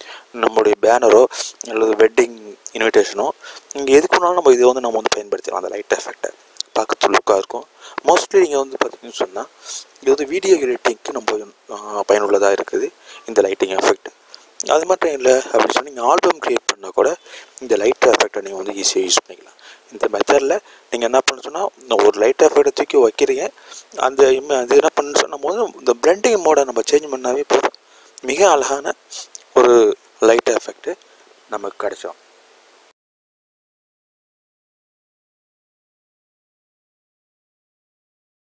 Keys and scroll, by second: 22.0 e.